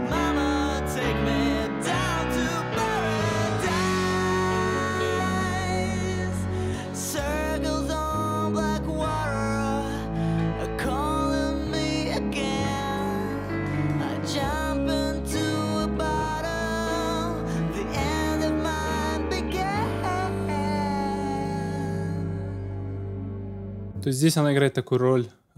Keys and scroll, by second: 23.6 space.